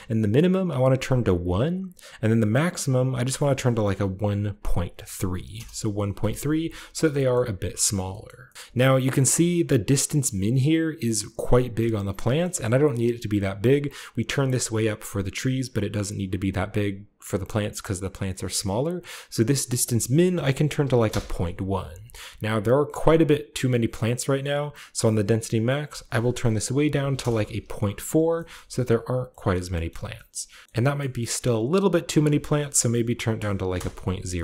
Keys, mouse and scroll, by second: 0.2-2.2 scroll up 1, 0.5 click, 0.9 1, 1.3 click, 2.2-2.8 scroll up 1, 2.9-4.6 drag, 3.1-4.8 typing, 5.4 Return, 7.3 shift+middle click, 7.3-7.8 shift+scroll up 1, 7.8-8.5 shift+scroll down 1, 8.1 shift+middle click, 8.5 shift+middle click, 8.6-11.9 scroll up 1, 8.7-9.9 middle drag, 9.0-9.7 typing, 12.0-14.0 shift+scroll up 1, 12.4-14.0 shift+middle drag, 12.4 typing, 19.6 click, 20.9 typing, 20.9 Return, 22.2-23.7 scroll down 1, 25.6-27.0 drag, 27.0 typing, 27.0 Return, 28.7 shift+a, 29.5-29.8 shift+scroll down 2, 29.8 shift+middle click, 30.6-31.8 scroll up 3, 31.8 click, 33.6 typing, 33.6 Return, 34.3-34.4 scroll down 1.